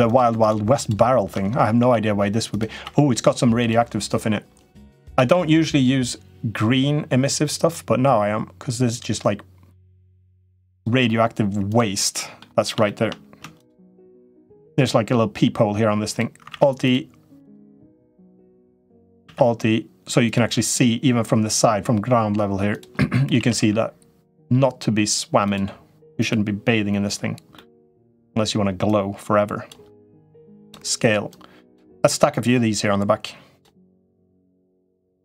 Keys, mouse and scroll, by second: 0.2 shift+click, 0.6 shift+click, 1.6 i, 2.7 e, 4.9 a, 5.3 g, 11.4 click, 11.8 middle click, 12.7 shift+middle click, 13.4 shift+click, 16.2 alt+e, 17.7 i, 19.1 alt+e, 23.1 a, 23.4 g, 25.9 click, 27.4 middle click, 27.9 l, 28.9 click, 30.0 s, 31.1 click, 32.3-33.4 drag, 34.3 click.